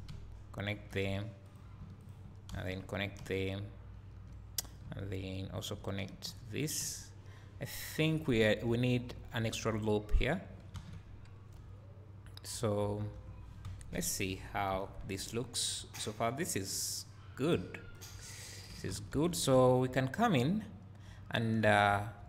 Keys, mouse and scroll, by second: 1.5 click, 2.1 shift+click, 2.5 f, 3.0 scroll down 1, 4.7 click, 5.6 shift+click, 6.2 f, 10.8 alt+a, 13.6 KP_1, 14.3-14.7 scroll down 2, 14.7 Tab, 15.1 scroll down 2, 17.9-22.2 drag, 19.2 Tab, 21.9 1.